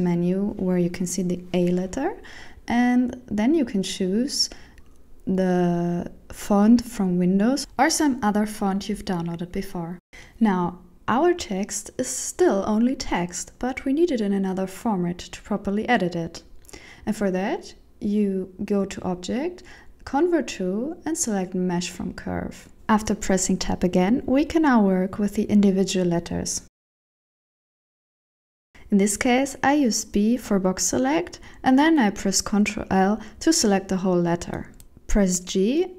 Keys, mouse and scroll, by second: 0.9 click, 9.5 Tab, 12.5 Tab, 13.7 Tab, 14.2 shift+middle click, 18.2 click, 22.0 shift+middle click, 22.5 Tab, 25.0 alt+z, 25.8 middle click, 26.9 alt+z, 27.7 KP_7, 29.0 b, 32.1 ctrl+l, 33.8 g.